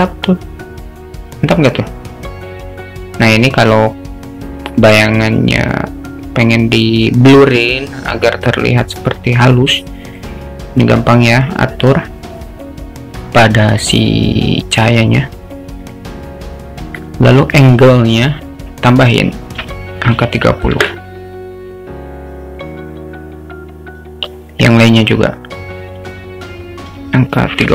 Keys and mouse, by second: 10.2 click, 15.9 drag, 18.1-21.8 drag, 24.6 click, 26.1-27.7 drag.